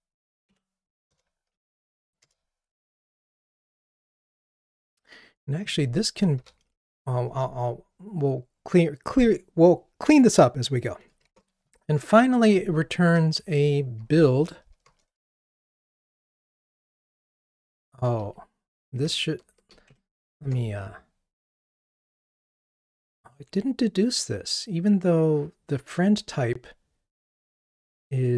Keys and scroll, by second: 0.5 Escape, 1.2 alt+Return, 11.3 ctrl+Tab, 14.0 alt+Return, 18.2 super+z, 19.0 super+z, 20.5 ctrl+Tab.